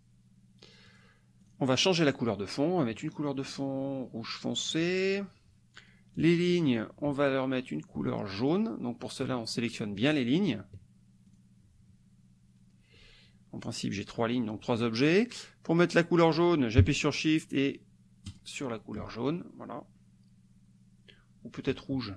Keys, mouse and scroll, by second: 0.9 click, 1.4 click, 4.7 click, 6.2 click, 7.2 shift+click, 8.5 shift+click, 10.1 shift+click, 11.3 shift+click, 18.5 shift+click.